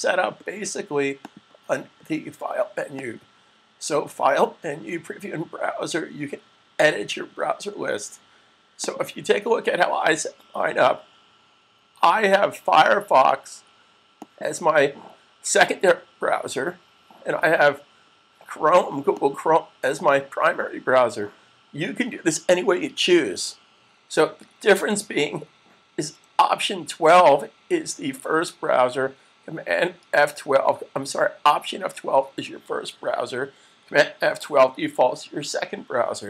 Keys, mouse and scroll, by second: 1.1 click, 8.6 click, 14.0 click, 19.0 click.